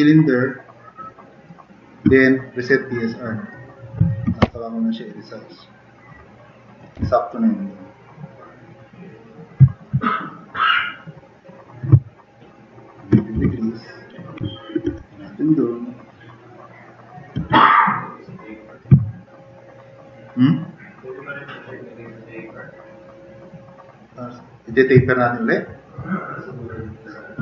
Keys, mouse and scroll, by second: 4.3 t, 4.4 t, 4.8 t, 5.0-5.4 drag, 5.6 click, 7.0 r, 9.7 click, 11.0-11.3 drag, 13.5 t, 13.6-14.3 drag, 14.4 drag, 14.9 e, 16.7-17.1 drag, 17.5 e, 17.9-18.8 drag, 19.1 click, 19.3-19.8 scroll up 1, 20.0-20.3 drag, 20.8-21.8 drag.